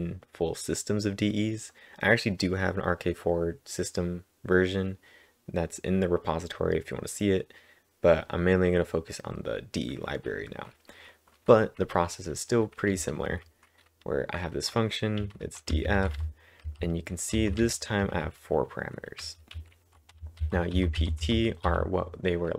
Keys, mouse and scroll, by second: 12.7-13.4 typing, 15.9-20.4 typing, 21.4-22.2 typing.